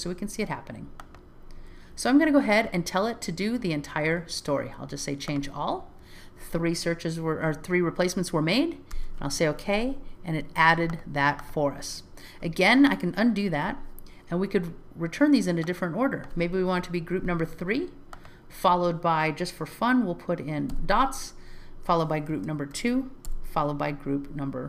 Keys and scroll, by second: 1.6 alt+z, 9.0 Return, 13.5 super+z.